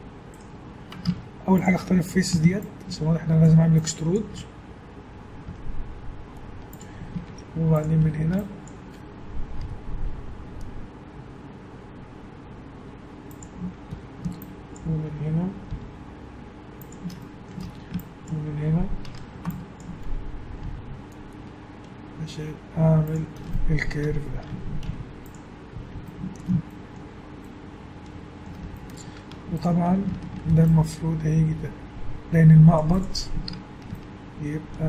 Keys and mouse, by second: 1.1 ctrl+Tab, 3.5-4.9 drag, 5.5 e, 7.3 ctrl+Tab, 8.0 a, 8.4 click, 9.6 g, 13.9 a, 15.7 click, 15.7 g, 17.6 a, 18.0-19.1 drag, 19.1 a, 20.6 g, 23.5 middle click, 23.7 click, 24.5 Tab, 24.9 z, 29.3 Tab, 30.4 ctrl+r, 33.5 Tab.